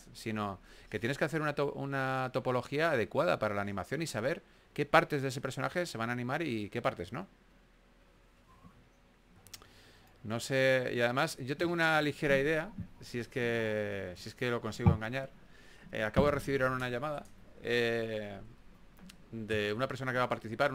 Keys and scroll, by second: 0.0-0.6 typing, 2.5 s, 3.7 s, 5.3 s.